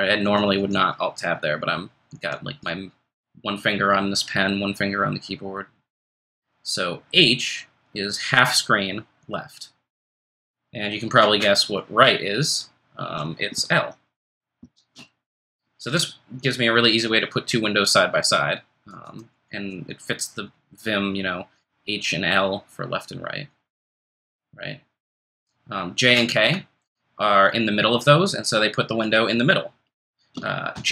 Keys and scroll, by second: 14.6 ctrl+shift+super+l.